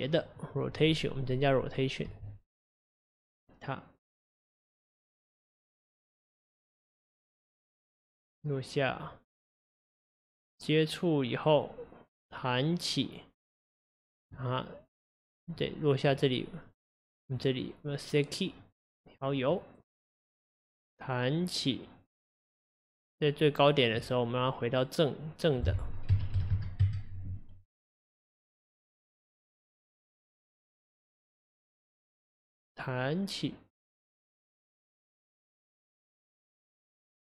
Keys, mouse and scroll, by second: 0.1-1.2 scroll up 2, 2.2 r, 6.4 click, 15.6 click, 19.5 click, 26.3-31.1 drag, 31.1-32.2 right drag, 32.2 click.